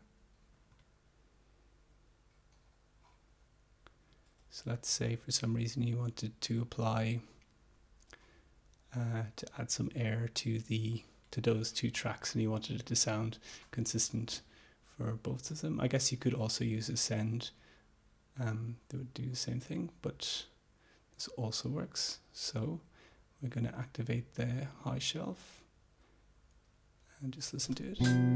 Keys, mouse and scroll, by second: 0.7 click, 4.3 click, 4.7 click, 5.6-7.3 drag, 10.5-11.6 drag, 25.4 click, 27.8 space.